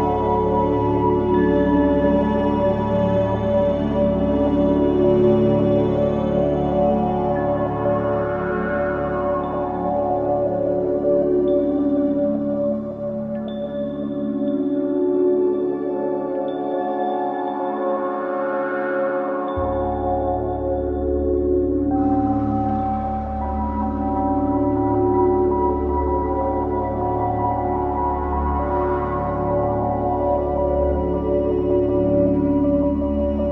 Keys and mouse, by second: 0.0-0.6 typing, 2.0 click, 3.3 ctrl+s, 3.5 alt+a, 4.1-9.8 ctrl+alt+drag, 10.2-10.9 drag, 11.2 click, 11.7-15.0 drag, 15.2-16.3 typing, 17.4-18.1 typing, 17.6-18.4 alt+drag, 21.5-22.7 drag, 25.6 typing, 26.9-28.8 drag, 28.3-29.1 typing, 29.1 alt+click, 29.9 click, 30.1 click, 31.1-33.5 typing.